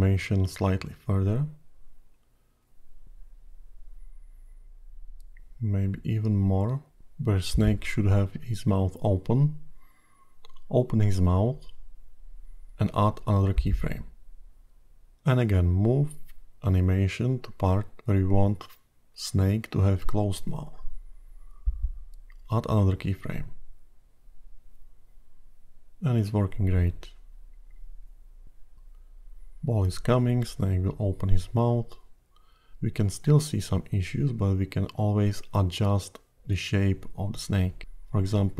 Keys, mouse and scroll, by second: 0.6 click, 7.1 click, 10.3 click, 14.3 click, 16.0 click, 20.3 click, 23.5 click, 25.2 click.